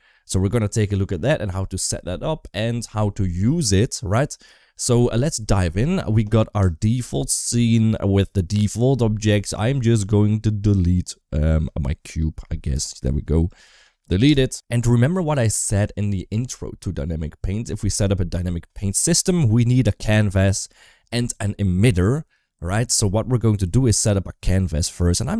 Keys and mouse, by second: 13.3 click, 14.1 Delete.